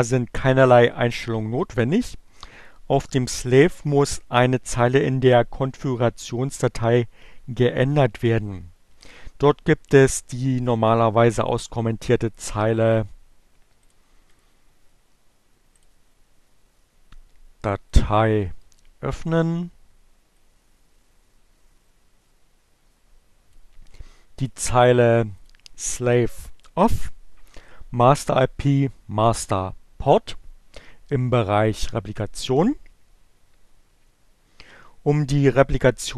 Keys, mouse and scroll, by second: 13.5 click, 14.1 click, 15.5 click, 17.5-18.6 drag, 19.9-23.5 drag, 24.6 click.